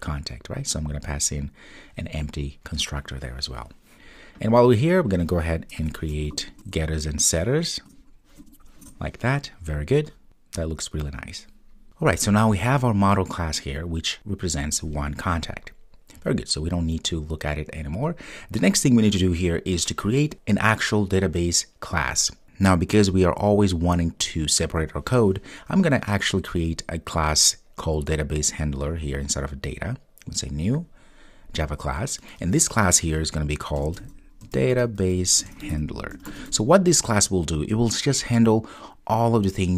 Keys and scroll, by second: 6.4 super+n.